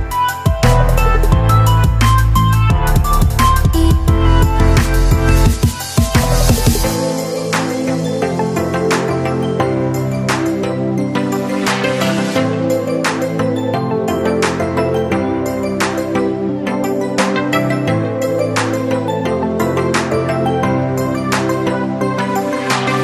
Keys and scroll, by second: 17.4 f, 19.5 ctrl+r, 20.4 z, 22.1 space.